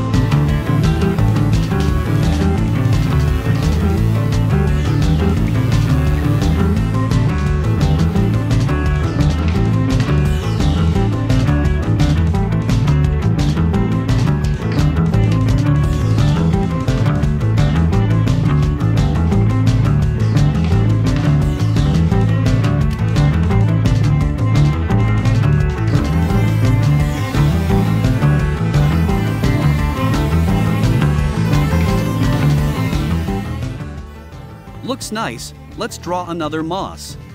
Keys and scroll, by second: 12.6 -, 17.6 a, 29.1 v.